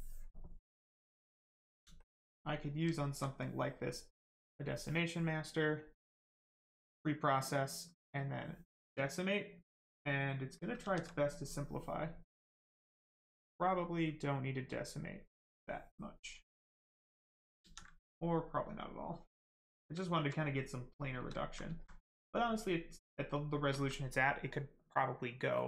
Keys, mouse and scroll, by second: 1.9 alt+click, 2.5 right click, 2.9 alt+right click, 4.4 click, 8.1 click, 9.0 right click, 10.8 ctrl+z, 11.1 right click, 12.8 click, 15.2 click, 16.0 right click, 17.6 ctrl+z, 17.9 right click, 19.7 shift+right click, 20.0 alt+right click, 20.3 right click, 20.4 right click, 21.0 shift+right click, 21.3 alt+right click, 22.0 right click, 22.0 right click, 23.4 shift+right click, 23.6 alt+right click.